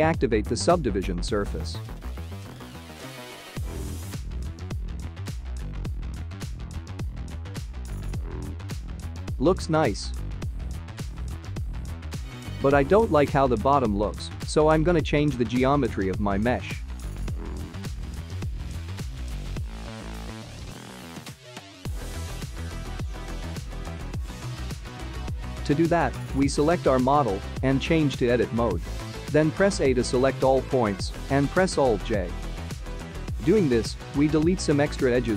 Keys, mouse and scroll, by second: 0.1 click, 0.7 click, 1.1 space, 9.1 click, 18.4 space, 19.5 click, 20.4 click, 21.3 Tab, 27.0-27.7 scroll up 4, 28.6-29.8 scroll up 2, 31.3 alt+j, 34.9 Tab.